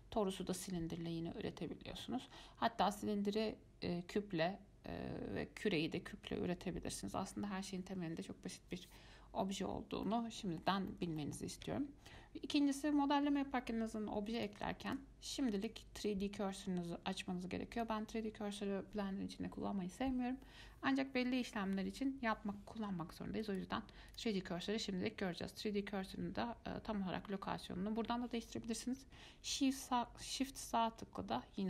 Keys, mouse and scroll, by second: 10.3-14.4 middle drag, 14.6 click, 15.8-18.8 drag, 24.3 click, 29.7-31.6 shift+right drag.